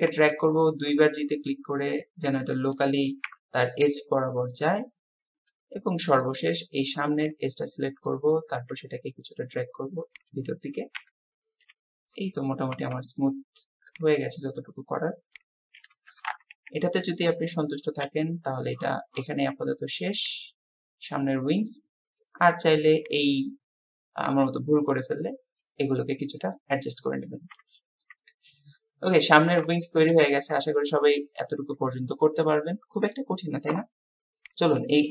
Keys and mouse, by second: 0.1 g, 1.8 typing, 3.3 KP_7, 5.5-6.3 drag, 7.6 click, 8.5 g, 11.0 KP_7, 12.8 g, 15.7-19.2 middle drag, 16.5 KP_1, 22.2 click, 24.3-25.7 drag, 26.0-27.1 drag, 27.6 Tab, 28.0-29.6 drag, 29.8 shift+drag, 30.3-31.0 drag, 31.2 Tab.